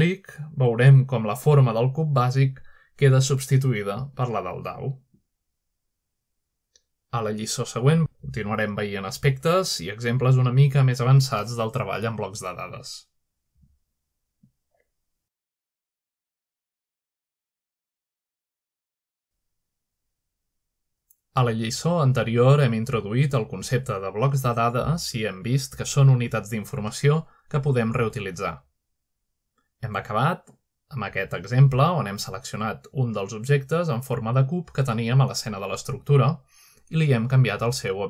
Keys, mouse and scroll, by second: 0.9 click, 0.9-2.0 scroll up 2, 1.5-2.1 middle drag, 2.2 middle click, 3.3 shift+middle drag, 3.9-4.8 shift+middle drag, 6.9-7.5 shift+middle drag, 8.1 shift+middle click, 9.7 middle drag, 13.9 shift+middle click, 32.6-33.3 scroll down 2, 33.3-34.1 middle drag, 33.6-35.4 drag, 36.1-36.5 shift+middle drag, 36.1-37.0 scroll up 1, 36.7 shift+middle click.